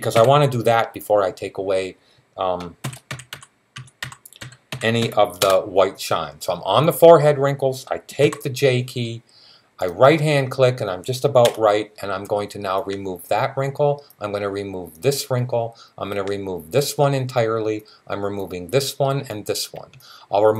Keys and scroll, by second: 0.0-0.5 typing, 2.4-5.3 typing, 8.0 j.